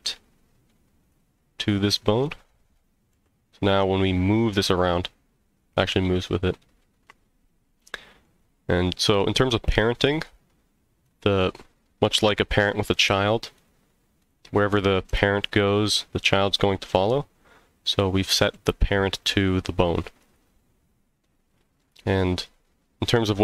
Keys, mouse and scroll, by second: 0.1 middle click, 1.0 click, 1.6 click, 2.1 click, 2.7 click, 3.1 g, 5.6 right click, 6.6-8.2 middle drag, 10.2 click, 11.0 click, 13.5 click, 14.2 click, 15.1 g, 16.2 right click, 17.0 click, 18.3 g, 20.2 right click, 21.2-21.8 middle drag.